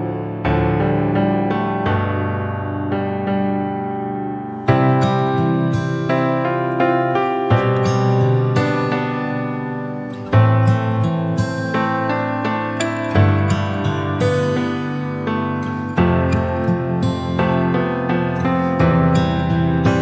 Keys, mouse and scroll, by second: 2.7 Delete, 3.2 shift+a, 7.1 KP_3, 8.2 KP_1, 9.4-11.5 shift+middle drag, 11.5-12.0 scroll up 1, 12.0-14.2 drag, 15.4 drag, 16.1 click, 17.2 r, 19.0 s, 19.9-20.0 middle drag.